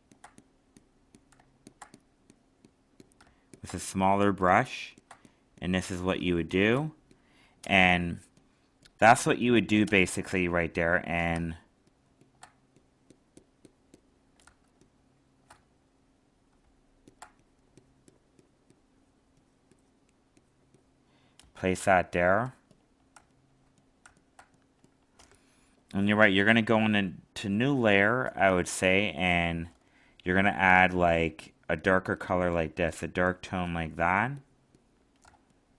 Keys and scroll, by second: 14.4 alt+space, 21.8 alt+space, 35.2 alt+space.